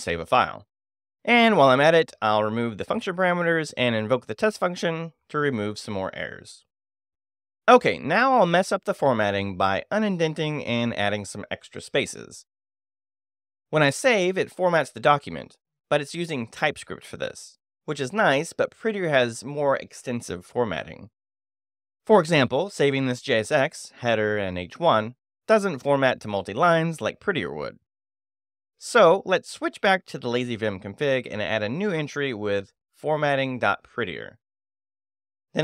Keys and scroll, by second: 0.3-1.3 typing, 2.9-4.6 typing, 4.8 Escape, 7.1 0, 7.7 5, 7.8 j, 9.1 shift+,, 11.5 Escape, 12.1 f, 12.2 shift+9, 12.9 a, 13.2 space, 13.9 Escape, 14.3 shift+;, 15.1 w, 15.3 Return, 21.4 9, 21.7 j, 22.7 o, 24.5 super+v, 26.0 Escape, 26.4 shift+;, 26.6 shift+w, 26.7 Return, 28.4 ctrl+space, 28.6 ctrl+2, 29.2-34.8 typing, 32.7 Escape, 34.3 Escape, 34.8 Return, 35.5 ctrl+Return, 35.5 ctrl+space.